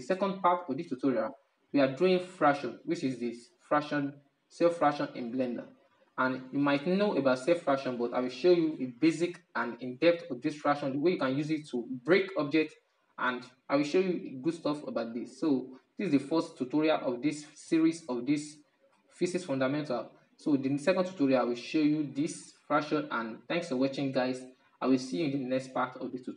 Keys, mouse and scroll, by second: 17.5-26.0 shift+middle drag.